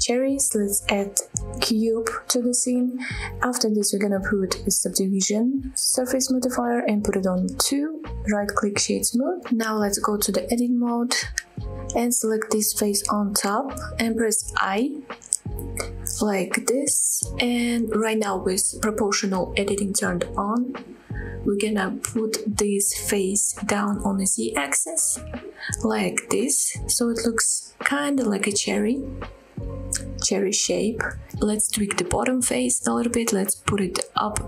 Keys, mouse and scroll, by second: 2.0-2.5 scroll down 1, 2.5 g, 2.9 x, 3.5 click, 3.6-4.2 shift+middle drag, 4.2 scroll up 2, 4.4 shift+middle click, 5.0 click, 5.3-6.3 drag, 7.2 click, 8.3-9.4 right drag, 9.4 scroll down 1, 9.6 middle drag, 9.9 middle drag, 10.3 scroll up 2, 10.5 middle click, 10.7 s, 11.5 click, 11.7-12.0 middle drag, 12.0 Tab, 12.3 scroll up 2, 12.5 middle click, 12.9 shift+middle click, 13.7 click, 14.1 click, 14.4 middle click, 14.9 i, 16.1 click, 16.3 scroll up 1, 16.4 middle click, 17.1 shift+middle click, 17.3 middle click, 17.7 scroll down 1, 18.1 shift+middle click, 19.0 middle click, 20.0 g, 20.4 z, 21.2-22.5 scroll down 12, 23.9-24.6 scroll down 3, 24.2-24.6 scroll up 1, 24.6-26.2 scroll down 1, 26.2 click, 26.2 scroll down 1, 26.5 s, 26.9-27.5 scroll up 1, 27.5-28.1 scroll up 4, 29.6 click, 29.7 middle click, 30.2 scroll up 2, 30.4 middle click, 31.0 shift+middle click, 31.4 middle click, 31.9 click, 32.2-33.2 middle drag, 33.6 g, 34.0 z.